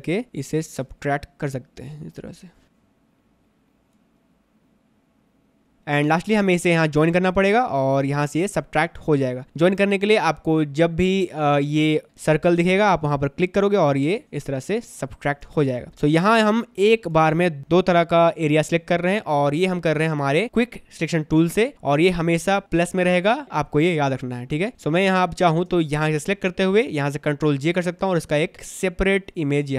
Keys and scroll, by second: 2.6 space, 14.9 space, 24.0 space, 27.8 ctrl+j.